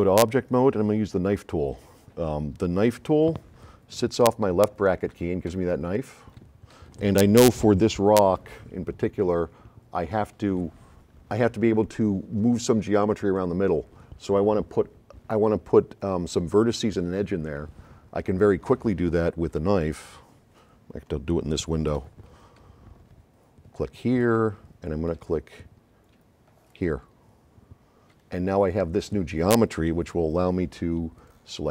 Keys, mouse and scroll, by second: 0.4-0.7 drag, 4.5 [, 5.5 [, 6.8 [, 21.0 middle click, 22.6 [, 24.0 ,, 24.2 click, 26.7 click, 31.2 click.